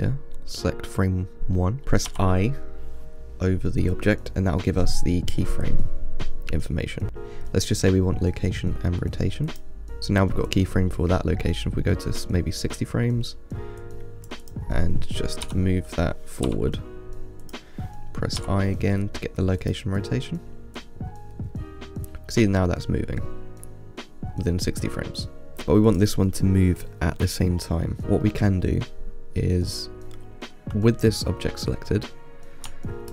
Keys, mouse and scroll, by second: 10.8-13.8 drag, 14.1 click, 14.1-14.5 drag, 14.7 click, 15.7 g, 21.0-24.1 drag, 26.1 click, 28.0-31.5 middle drag.